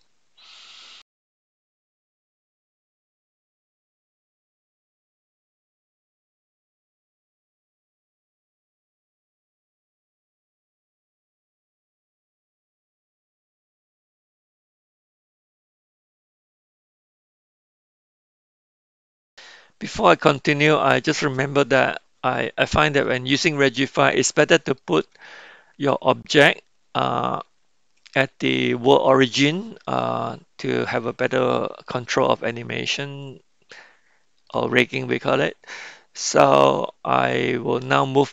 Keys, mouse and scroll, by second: 0.0-2.8 middle drag, 3.7 r, 5.3 s, 5.9 middle click, 6.7 r, 8.2 r, 9.6-9.9 middle drag, 10.1-11.6 scroll up 1, 11.6 g, 13.8 middle click, 14.2 s, 17.3-18.3 middle drag, 18.5 middle drag, 18.7 shift+middle drag, 19.9 middle click, 23.1-24.9 middle drag, 25.9-27.4 middle drag, 30.0-30.9 middle drag, 31.5-31.9 middle drag, 32.5-34.5 middle drag, 35.1-35.7 middle drag.